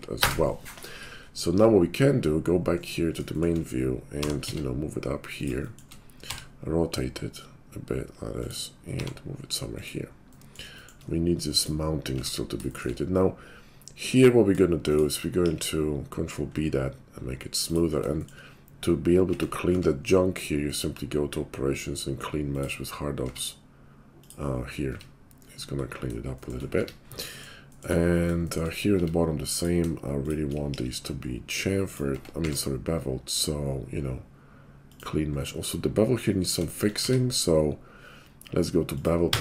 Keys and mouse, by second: 2.1 /, 2.6-5.9 middle drag, 4.1 g, 6.2 r, 8.9 g, 12.2 Tab, 12.5 shift+click, 12.9-14.8 middle drag, 14.8 shift+click, 15.0-20.8 shift+middle drag, 15.4 ctrl+b, 19.3 Tab, 19.7 q, 23.2 q, 24.9 Tab, 26.2 shift+click, 26.6 middle click, 26.8 Tab, 27.2 shift+click, 27.9 middle click, 28.3 shift+click, 28.6 middle click, 28.9 Tab, 30.1 shift+click, 30.7 ctrl+b, 32.1 Tab, 32.4 q, 37.0 q.